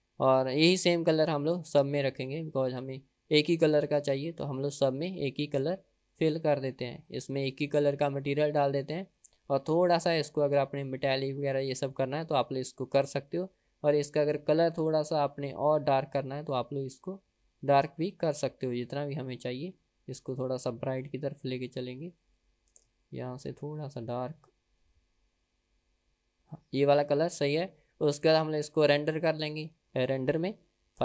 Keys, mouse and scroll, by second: 0.6 drag, 1.5 click, 3.0-4.0 drag, 4.7 drag, 6.5-7.5 drag, 8.1 middle click, 8.6 drag, 9.5 middle click, 10.6-11.1 scroll down 1, 11.8-12.4 middle drag, 14.2 click, 27.3-28.0 middle drag, 29.9-31.0 scroll down 2.